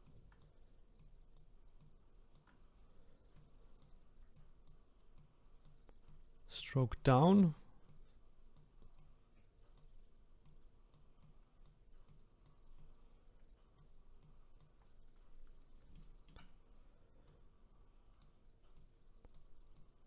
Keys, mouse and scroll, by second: 15.3-15.9 scroll down 1, 15.9 shift+middle click, 16.7-17.3 scroll up 1, 17.3-20.0 drag.